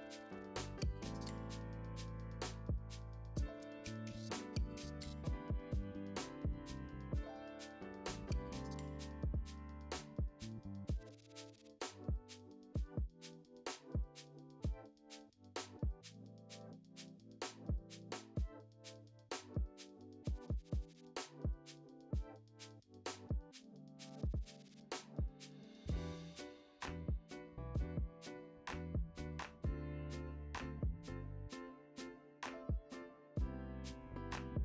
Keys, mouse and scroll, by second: 0.0-0.2 typing, 1.9 click, 2.0 `, 2.4 g, 2.8 click, 4.3 KP_7, 4.6 alt+r, 5.6 click, 5.7 g, 5.9 click, 6.0 `, 6.8 click, 7.7 s, 10.0 `, 10.4 r, 12.8 click, 13.5 `, 13.8 click, 14.3 g, 15.0 Tab, 15.2 click, 20.2-21.8 drag, 20.2 `, 21.8 x, 22.0 `, 22.2 ctrl+z, 24.2 click, 24.6 Tab, 24.8 2, 24.9 click, 25.2 f, 25.4 Tab, 25.8 click, 25.8 `, 26.9 click, 31.1 h, 31.2 click, 31.3 `, 31.6 ctrl+z, 32.2 click, 32.2 `, 33.7 click, 33.8 Tab, 33.9-34.6 typing.